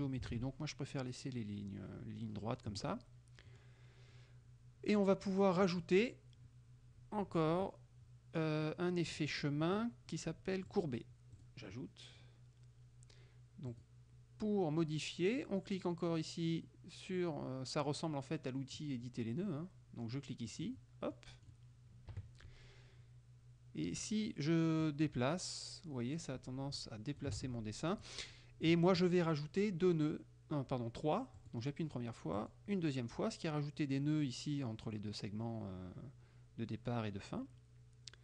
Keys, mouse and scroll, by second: 0.4 ctrl+z, 0.8 ctrl+click, 3.6 click, 5.7 click, 7.1-7.9 scroll down 4, 9.2 click, 10.8 click, 11.4 click, 13.8 click, 20.6 click, 21.2 click, 22.2 KP_Subtract, 24.9-27.4 drag, 27.4 ctrl+z, 28.1 click, 31.5 click, 32.4 click.